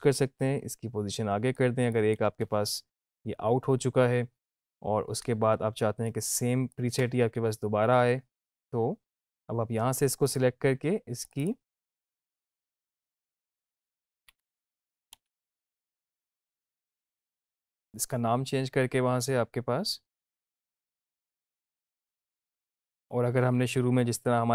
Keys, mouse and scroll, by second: 5.1 space, 6.3-7.0 click, 7.0 space, 9.7 space, 22.6 space.